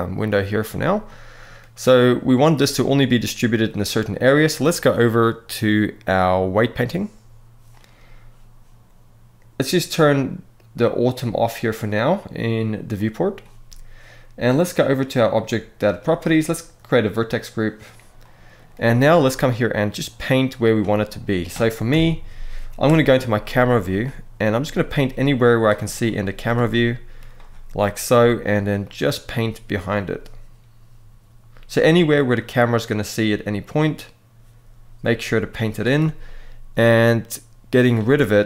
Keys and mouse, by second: 0.8 middle click, 5.0-7.2 drag, 12.7 click, 17.9 middle click, 18.9-20.5 drag, 20.7 middle click, 21.6 KP_7, 22.5 KP_0, 25.7 click, 26.5 middle click, 27.8 f, 36.6 click, 38.1-38.4 ctrl+drag.